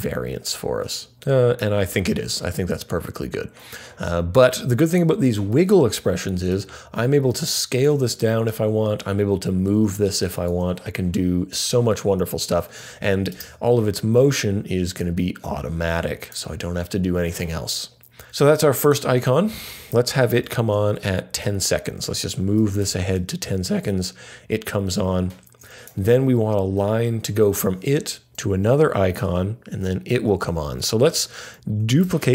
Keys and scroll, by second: 20.3 alt+shift+Page_Down, 31.7 super+d.